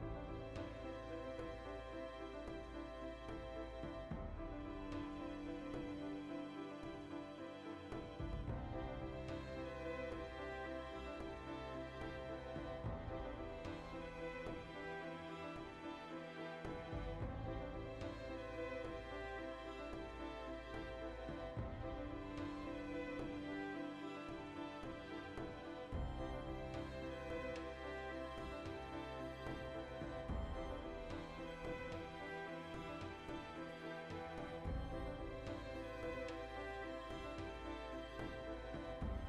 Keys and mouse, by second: 0.0-1.8 shift+middle drag, 1.8-6.1 drag, 6.1-7.8 ctrl+middle drag, 7.1 Tab, 7.8 right click, 7.9-8.9 middle drag, 8.9 ctrl+right click, 9.2-11.9 middle drag, 11.9 right click, 12.6-14.2 shift+middle drag, 13.6 alt+q, 14.1 shift+d, 14.2 right click, 14.3-15.9 ctrl+middle drag, 14.7 e, 15.9 click, 16.3 s, 16.6 click, 16.7 g, 17.3 click, 17.6 alt+q, 17.8-20.4 ctrl+shift+middle drag, 20.0 s, 20.4 click, 20.4 g, 21.5 click, 21.8 alt+q, 22.0-24.8 shift+middle drag, 23.9 e, 24.8 click, 25.2 3, 25.6 alt+right click, 26.0 shift+d, 26.7 click, 26.8 middle click, 27.5 1, 27.6 right click, 28.1 2, 28.2 shift+right click, 28.7 f, 29.2 right click, 29.4 f, 30.1-35.3 middle drag, 30.4 a, 30.8 shift+n, 31.4 a, 32.2 z, 35.0 ctrl+r, 35.3 right click, 35.7 g, 36.2 click, 36.4-37.9 shift+middle drag, 37.0 alt+o, 37.9-39.0 alt+right drag, 39.0 alt+s.